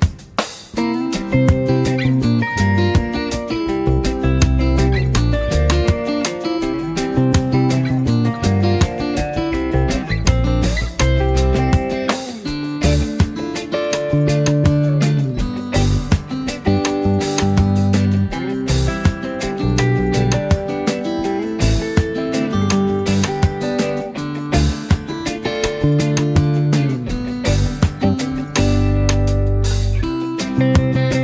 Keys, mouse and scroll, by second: 1.2 4, 2.4 Return, 3.0 click, 3.5 space, 3.8 click, 4.1 space, 4.8 click, 6.0-7.4 alt+shift+drag, 8.3 ctrl+z, 8.9 click, 9.1 space, 9.2 click, 9.6 v, 12.0 alt+shift+right click, 13.4 alt+shift+click, 16.1 Down, 19.3 click, 20.4 z, 20.7 click, 21.0 space, 21.8 v, 22.1 space, 22.4 click, 23.8 z, 24.1 click, 24.2 space, 24.5 click, 24.9 v, 25.8-30.1 drag.